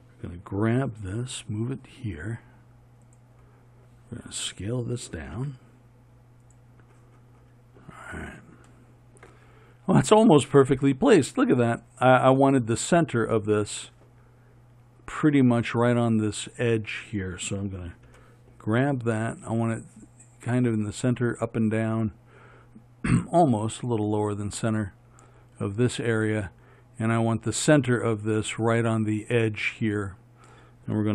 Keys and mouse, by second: 5.6 s, 18.3 g.